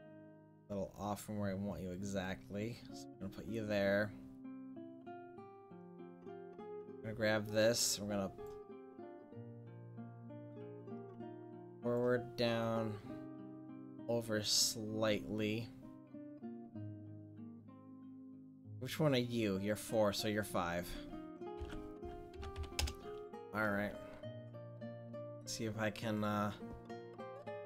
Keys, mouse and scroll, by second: 0.3-2.5 drag, 2.5 middle click, 2.8 middle click, 2.9 click, 3.1-4.3 middle drag, 6.4-8.0 right drag, 8.1 click, 8.7 middle click, 8.7 right click, 9.7-11.1 middle drag, 11.1-15.1 drag, 15.4 middle click, 17.9-19.4 right drag, 19.4 middle click, 19.6-22.8 drag, 24.9 c.